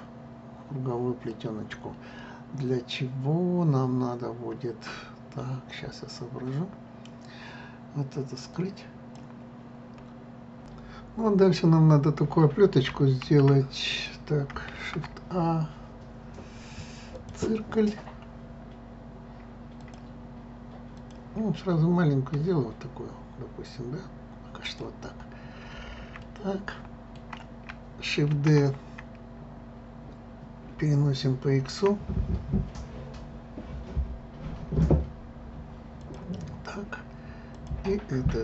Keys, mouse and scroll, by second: 2.6 scroll down 1, 9.2-10.3 drag, 10.3 scroll up 3, 11.2 scroll up 1, 13.9 click, 17.2 shift+a, 18.1-18.4 scroll up 1, 19.8 click, 20.9 click, 22.3 s, 25.1-25.6 scroll up 1, 26.2-28.3 shift+middle drag, 37.5 click.